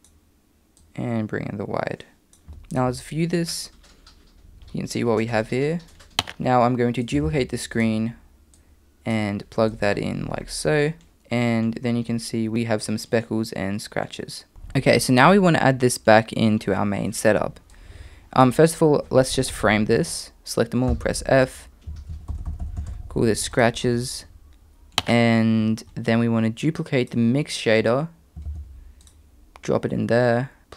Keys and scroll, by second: 7.3 shift+d, 20.9 f, 28.5 shift+d.